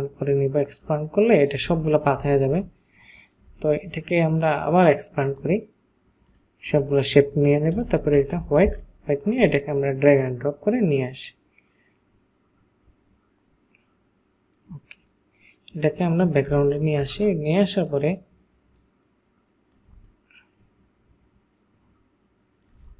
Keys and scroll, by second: 1.7 ctrl+space, 2.5 ctrl+alt+space, 8.1 |, 16.5 ctrl+space, 18.9 ctrl+space.